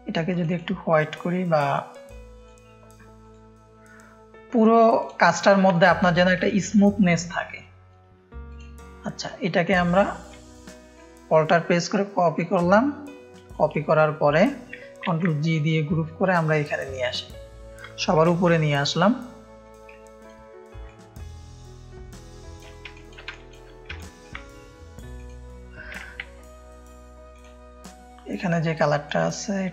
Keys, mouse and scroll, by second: 0.3 click, 1.7 click, 3.2-4.2 drag, 4.9 click, 5.7 ctrl+space, 5.7 ctrl+click, 6.4 ctrl+space, 6.4 ctrl+click, 7.6 click, 8.4-9.6 drag, 10.2 alt+click, 12.1-13.5 alt+shift+drag, 15.1 ctrl+g, 15.5-16.9 drag, 19.5 click, 20.0 space, 20.8 ctrl+click, 20.9 ctrl+space, 22.9 click, 22.9 space, 23.9 ctrl+space, 23.9 ctrl+click, 25.1 click, 29.0 click.